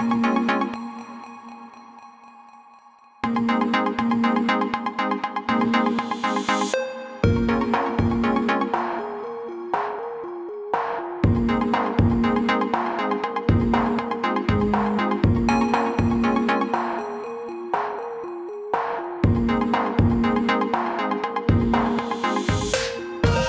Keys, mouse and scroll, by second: 0.9 alt+scroll up 1, 3.5 click, 5.3-5.9 alt+scroll down 2, 6.9 click, 16.5 click, 19.9 shift+click.